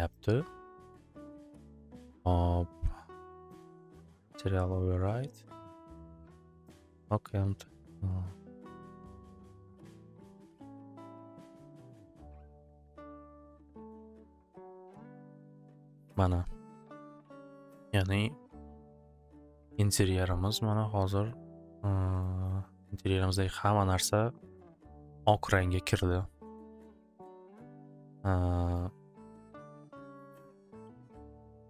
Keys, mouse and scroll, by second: 0.1 click, 4.3 click, 5.9-9.5 drag, 11.1 click, 13.6 click, 14.4 click, 22.2 click, 22.7 click, 24.1 click, 27.0 click, 27.8 click.